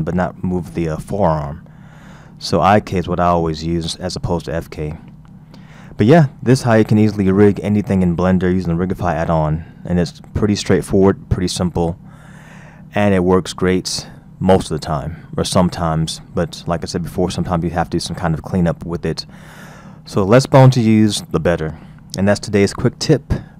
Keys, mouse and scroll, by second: 2.0-4.5 scroll down 3, 4.8-5.6 scroll down 3, 5.6-6.4 scroll up 4, 6.4-7.3 scroll down 3, 7.3-8.4 scroll up 4, 8.4-9.8 scroll down 2, 13.0-13.6 scroll down 1, 13.6-15.2 scroll up 3, 16.0-18.8 scroll down 4, 18.8-20.5 scroll up 4.